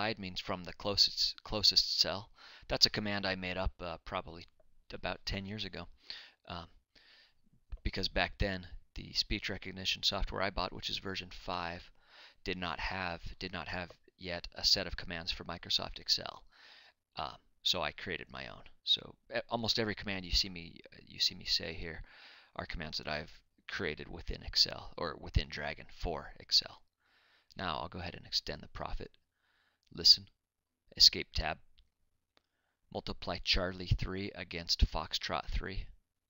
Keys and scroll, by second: 33.5 Escape, 34.0 Tab.